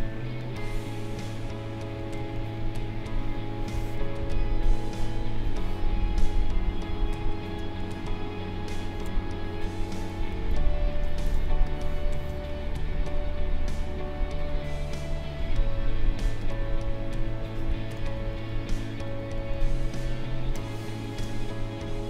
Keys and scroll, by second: 1.7 Delete, 6.0 Delete, 7.5 space, 10.5 ctrl+=, 11.4 space, 17.9 Delete, 20.5 space.